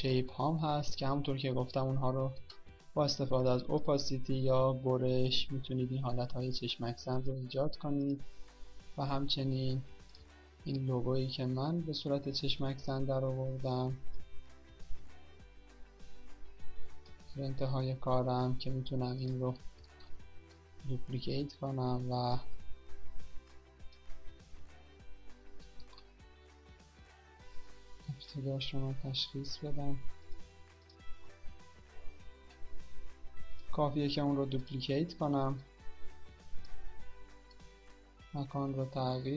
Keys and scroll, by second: 20.6 ctrl+d, 26.3 ctrl+z.